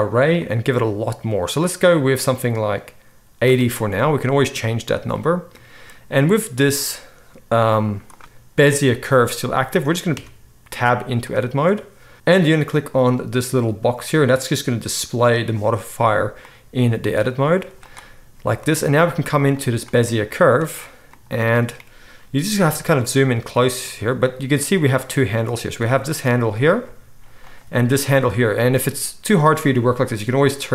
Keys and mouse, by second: 7.8 z, 10.3 Tab, 10.5 middle click, 12.1-13.9 right drag, 13.9 middle click, 14.0-19.5 right drag, 17.5 z, 19.5-23.0 middle drag, 21.1 drag, 21.1 right drag, 22.7 shift+drag, 22.7 shift+right drag, 25.8 g, 27.5 click, 28.1-30.7 middle drag, 28.2 g.